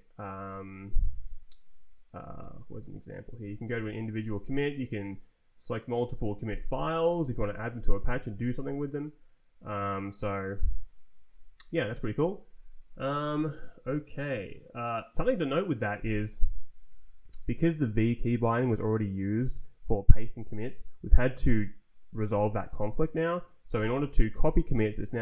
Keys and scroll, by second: 0.1 Right, 0.7 Down, 2.6 Return, 3.3 Down, 3.7 `, 4.5 shift+Down, 6.5 space, 7.1 ctrl+p, 8.0 Down, 9.3 Escape, 11.2 Up, 11.7 Escape, 15.8 ctrl+t, 16.4 Down, 16.8 Up.